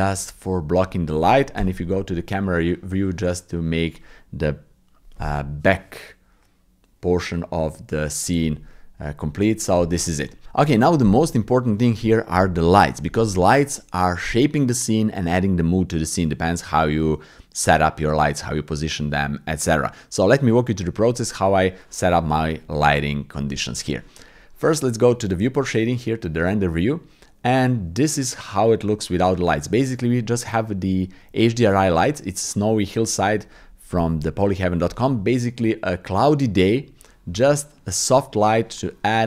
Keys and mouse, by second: 1.6 KP_0.